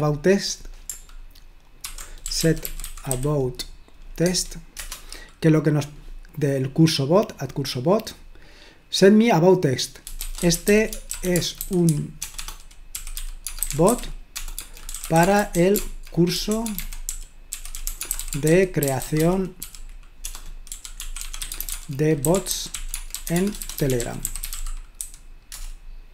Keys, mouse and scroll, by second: 2.0-3.5 typing, 4.2 Tab, 4.7 Return, 7.1 click, 9.9-25.5 typing.